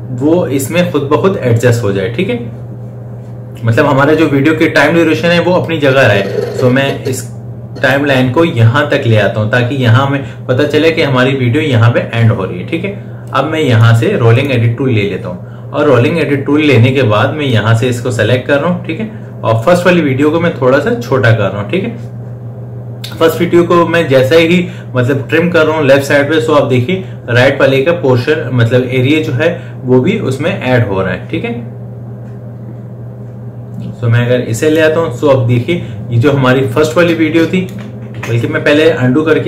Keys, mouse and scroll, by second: 5.9-10.8 drag, 13.6 click, 17.8-27.8 drag, 37.3 click, 38.5 ctrl+z.